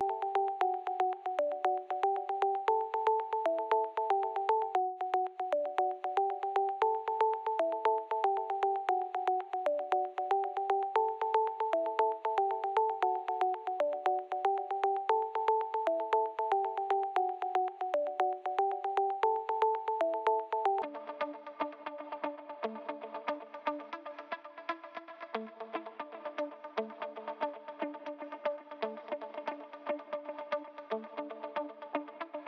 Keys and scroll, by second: 20.6 s.